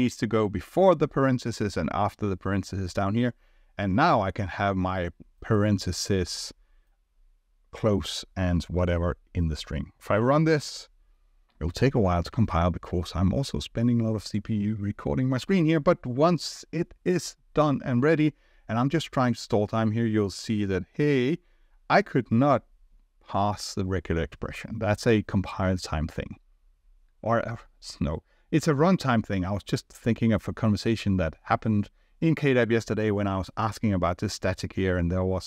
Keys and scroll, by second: 10.6 ctrl+r.